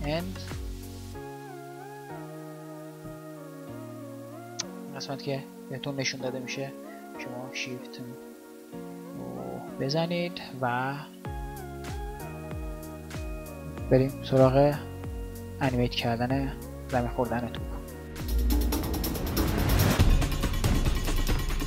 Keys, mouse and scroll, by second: 0.5 shift+Left, 1.5 shift+Right, 3.0 shift+Left, 9.1 shift+Right, 9.8 shift+Left, 10.5 shift+Right, 11.1 shift+Left, 19.8 ctrl+n.